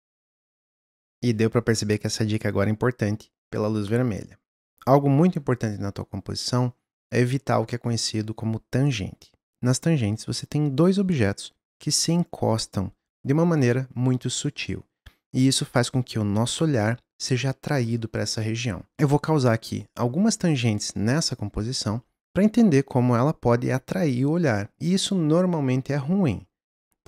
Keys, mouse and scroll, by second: 0.9 click, 18.9-19.8 scroll up 2.